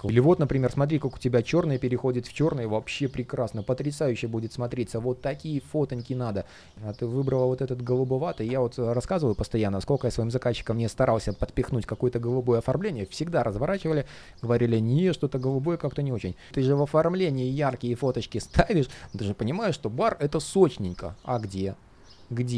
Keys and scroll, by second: 15.5 super+space.